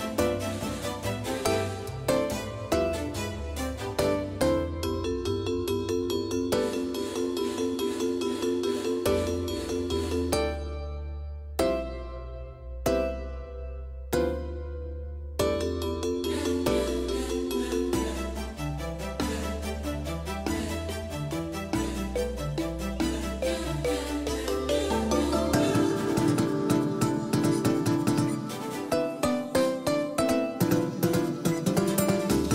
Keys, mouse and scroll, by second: 3.0-3.6 scroll up 1, 5.9 Tab, 8.4 click, 8.4-9.8 middle drag, 9.0-12.8 right drag, 9.9-12.3 drag, 11.5-12.8 middle drag, 12.8 KP_5, 13.2 KP_1, 13.8 KP_3, 15.1 KP_5, 17.1 r, 23.5 Tab, 27.0-29.2 drag, 30.3 middle click.